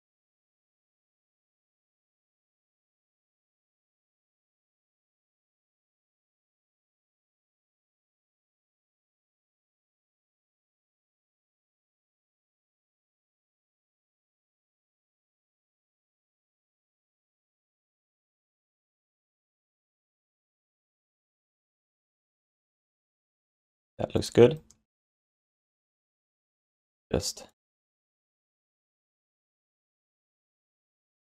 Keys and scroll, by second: 2.3 q, 3.1 alt+shift+d, 3.4 ctrl+s, 8.9 w, 10.4 r, 11.6-12.4 typing, 13.7 r, 15.7-16.8 typing, 18.5 q, 19.5 alt+shift+d, 19.9 3, 24.4 alt+q, 25.9 1, 26.8 w, 28.9 space, 29.7 f, 31.0 5.